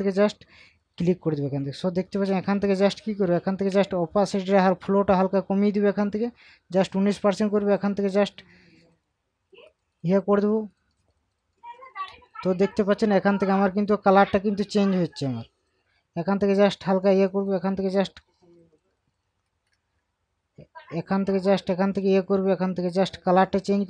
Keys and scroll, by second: 3.0 ctrl+z.